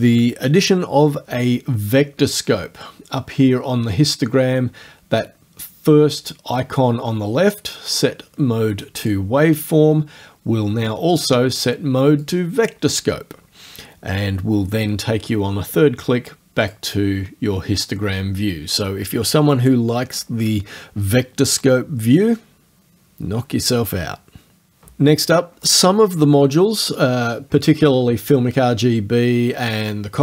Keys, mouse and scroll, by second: 9.1 click, 12.2 click, 16.7 click.